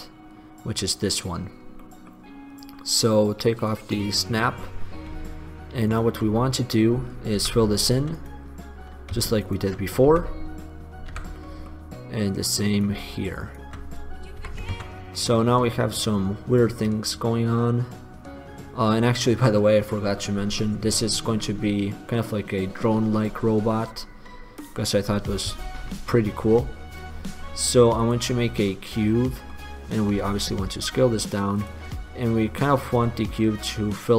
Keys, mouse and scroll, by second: 1.8 click, 2.0 middle click, 2.1-3.0 drag, 4.4-5.5 middle drag, 6.3 click, 7.6 f, 10.2 d, 10.5 click, 10.8 right click, 11.2 f, 14.5 f, 15.0 Tab, 20.2-22.2 middle drag, 24.1-25.3 middle drag, 26.0 shift+a, 30.3 s, 32.2-33.5 middle drag.